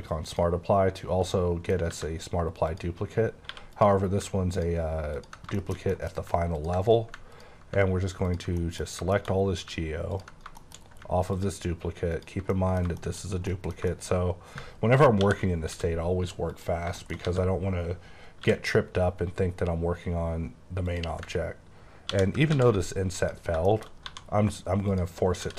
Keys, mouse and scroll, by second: 0.3 shift+click, 1.3 middle click, 1.9 Tab, 2.7 click, 3.5 3, 3.7 click, 5.2 click, 5.5 middle click, 5.9 double middle click, 6.5 ctrl+click, 8.6 middle click, 9.2 shift+middle click, 9.3 scroll up 4, 10.1 click, 10.6 shift+middle click, 11.4 ctrl+click, 12.2 ctrl+click, 12.7 middle click, 13.2 shift+scroll up 2, 13.5 middle click, 14.1 scroll up 3, 15.2 |, 15.7 x, 16.5 click, 17.0 shift+middle click, 17.2-18.4 scroll up 2, 17.3 a, 18.4 scroll up 1, 18.4 i, 20.9 click, 22.1 i, 22.5 x, 23.2 click, 23.6 shift+middle click, 23.9 shift+scroll up 3, 24.1 1, 24.9 click, 25.4 typing.